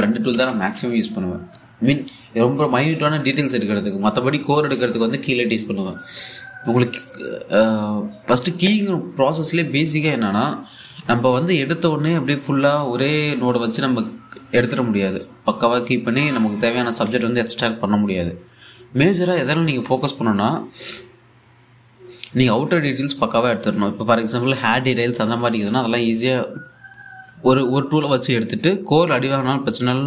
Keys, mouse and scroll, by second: 1.0 l, 26.7 scroll down 1, 28.4 scroll up 1.